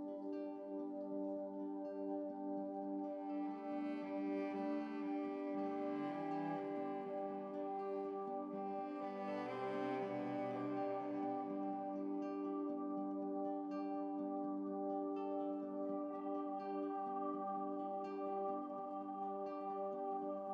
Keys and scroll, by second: 0.1 Up, 0.2 Up, 0.6 Up, 3.0 Right, 6.6 Down, 6.8 Right, 6.9 Right, 8.0 ctrl+z, 8.6 Up, 8.8 Up, 8.8 Left, 9.4 Left, 9.9 Left, 9.9 Up, 10.2 Right, 11.9 ctrl+z, 13.4 -, 15.2 Down, 15.2 Down, 15.8 Up, 18.4 Down, 18.7 ctrl+z.